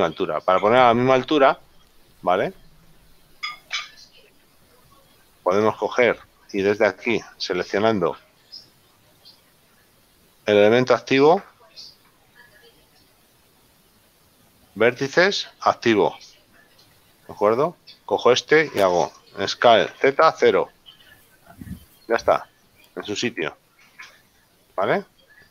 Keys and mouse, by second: 1.1 right click, 2.5 middle click, 3.8 g, 4.5 z, 4.8 click, 9.2 click, 11.2 click, 13.5 click, 18.5 shift+right click, 21.9 middle click.